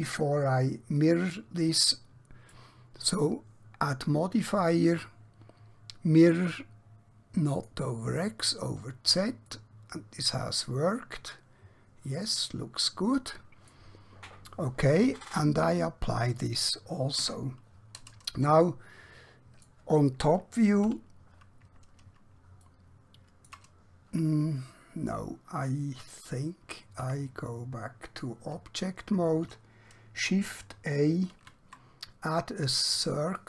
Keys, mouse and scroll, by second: 1.0 middle click, 4.6 click, 9.6 middle click, 16.4 click, 17.3 Tab, 18.5 middle click, 20.8 KP_7, 22.7 shift+middle click, 27.1 Tab, 31.4 a, 33.3 click.